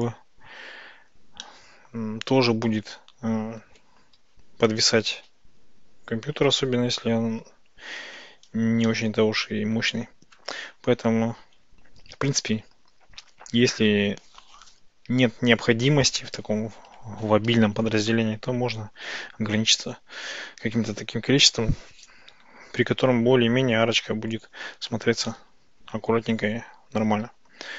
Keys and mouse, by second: 0.6 click, 1.5-3.7 middle drag, 8.9 shift+click, 27.3 ctrl+z.